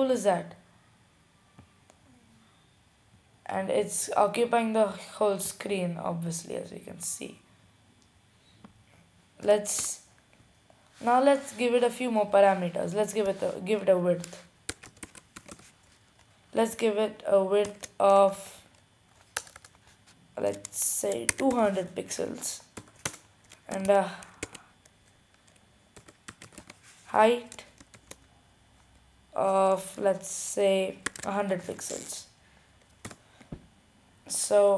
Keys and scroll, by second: 14.7-16.2 typing, 21.3-22.2 typing, 23.5-24.2 typing, 25.5 typing, 27.2-28.0 typing, 30.8-32.0 typing, 33.3-34.0 typing.